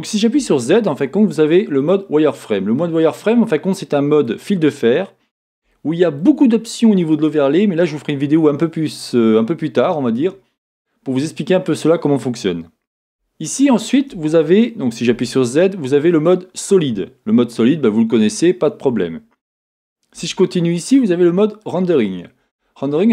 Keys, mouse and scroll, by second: 0.3 n, 2.8-20.1 middle drag, 2.8 z, 11.5-12.1 scroll up 2, 12.1-13.1 scroll down 2, 13.1 s, 14.2 Escape, 15.1 z, 20.1 z, 21.4-22.7 middle drag.